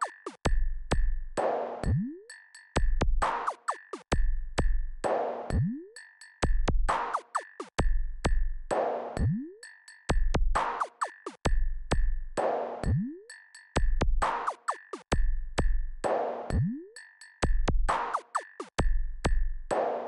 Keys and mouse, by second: 17.0 KP_2, 19.4 KP_Add.